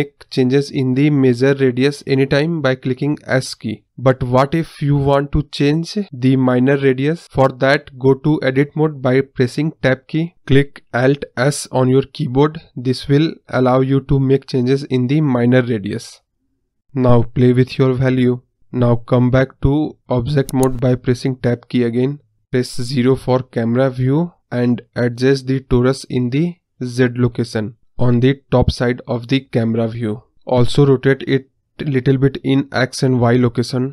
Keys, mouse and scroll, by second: 7.8 Tab, 10.8 alt+s, 17.3-18.9 drag, 20.7 Tab, 21.4 scroll down 1, 21.5-22.7 middle drag, 22.7 KP_0, 25.4 click, 26.5-28.1 drag, 29.7-31.2 drag, 31.5-33.1 drag.